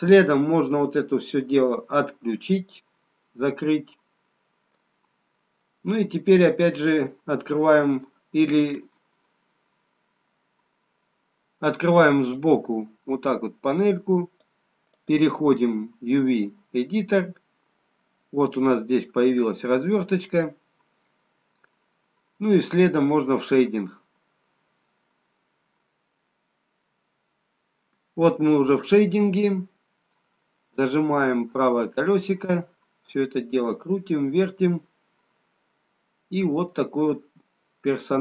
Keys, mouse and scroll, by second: 2.8 click, 3.9 middle click, 5.0-6.2 scroll down 1, 6.2 middle click, 6.2 scroll down 1, 13.5 click, 15.5 click, 18.0-18.8 scroll up 2, 18.8-19.5 scroll up 1, 19.5-20.9 scroll down 1, 20.9-21.5 scroll up 1, 21.5-22.0 scroll up 1.